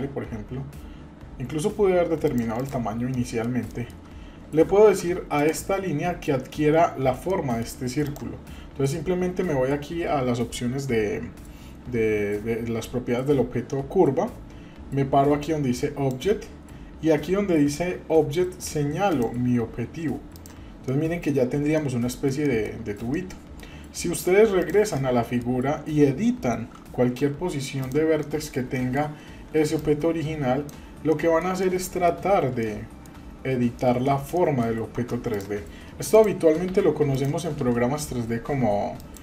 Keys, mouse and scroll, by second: 2.5 click, 3.1 middle click, 3.7 shift+middle click, 4.8 Tab, 5.4 click, 7.3-7.7 shift+middle drag, 8.0 drag, 15.7 click, 19.1 click, 20.9-21.3 middle drag, 21.4-21.8 scroll up 1, 21.8-22.8 middle drag, 22.8 scroll down 1, 23.1-23.6 middle drag, 24.6 drag, 24.9 scroll down 1, 24.9-25.4 middle drag, 26.9 Tab, 27.7 click, 28.2 middle click, 28.7 shift+middle click, 29.8 click, 31.1 shift+middle click, 31.6 middle click, 32.3-32.6 scroll up 2, 32.6 shift+middle click, 33.6-34.4 scroll down 3, 33.8 middle click, 34.4 middle click, 34.9 Tab, 35.3 drag, 36.1 click, 37.1 Delete, 37.1 click, 37.6 Delete.